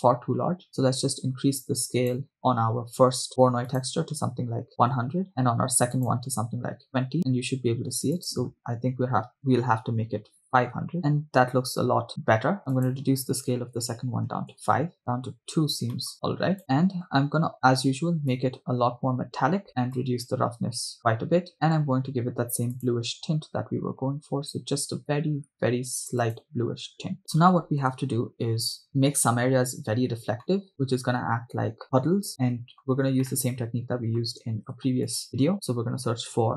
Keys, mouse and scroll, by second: 0.2-0.6 scroll up 1, 1.8 click, 3.3 middle click, 3.7-5.0 drag, 4.9 0, 6.0-7.1 drag, 8.1-10.8 drag, 10.2 0, 12.0 scroll up 4, 12.1 shift+middle drag, 12.9-14.6 drag, 15.4-15.9 scroll down 5, 15.9 middle click, 16.1 click, 16.7-17.2 middle drag, 17.5 scroll up 2, 17.5 middle click, 18.3 scroll up 1, 18.5-21.5 drag, 21.5-22.0 middle drag, 22.7 click, 27.2 shift+middle click, 30.5 middle click, 32.4 middle click, 33.0 scroll down 1, 33.3-34.3 middle drag, 34.7 shift+a.